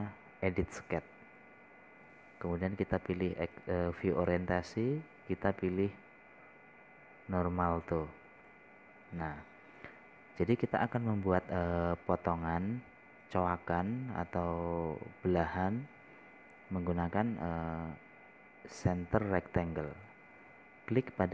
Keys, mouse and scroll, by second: 10.9 scroll up 1, 11.2 scroll down 1, 11.8-12.1 scroll up 1, 12.1 scroll down 1, 20.2-21.3 drag.